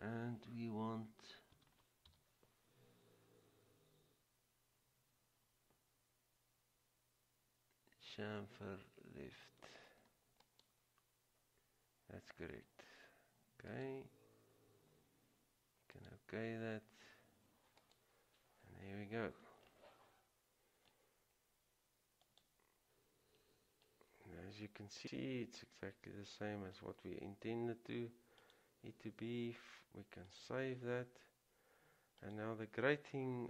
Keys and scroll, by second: 1.7 typing.